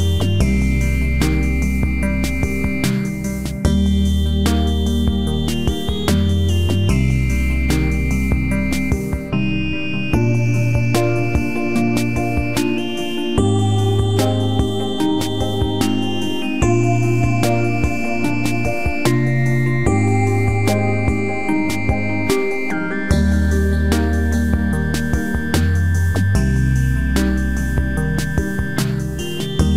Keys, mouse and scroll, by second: 2.1 space, 4.8 shift+middle click, 20.7 space, 22.1 s, 29.6 ctrl+click.